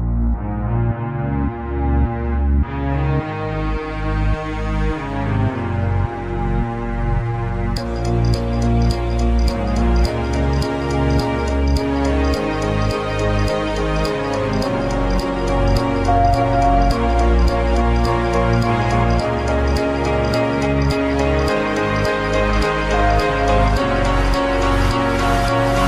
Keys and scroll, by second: 0.2 space, 1.3 ], 1.5 ].